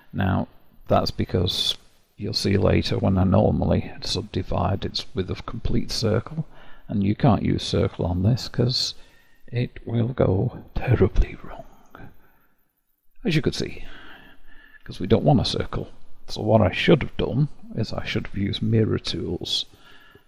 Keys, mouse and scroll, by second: 0.3 click, 8.1-10.4 ctrl+drag, 10.4-14.8 right drag, 14.8 ctrl+z, 17.1 KP_1, 18.7 n.